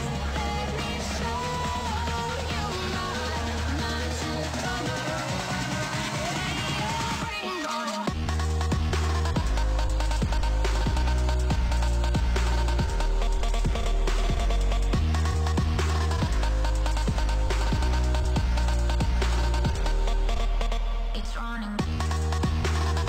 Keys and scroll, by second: 6.3 ctrl+s, 12.9 ctrl+s, 14.3 ctrl+s.